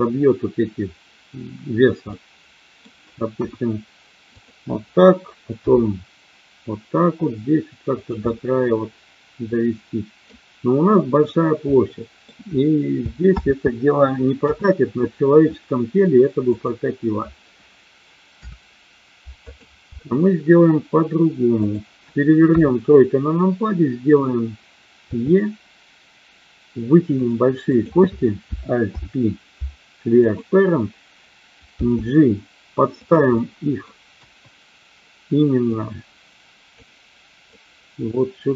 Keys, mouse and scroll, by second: 2.1 middle click, 3.4 KP_1, 4.3 click, 5.7 e, 7.8 click, 8.3-10.3 middle drag, 11.7 middle click, 13.2 ctrl+z, 14.3 KP_1, 16.4 click, 18.3 Delete, 21.6 click, 22.4 KP_3, 25.1 e, 27.1 click, 27.7 click, 28.8 alt+p, 31.7 g, 32.9 click, 33.3 middle click, 34.2 KP_1, 35.7-36.7 drag, 37.6-38.5 drag.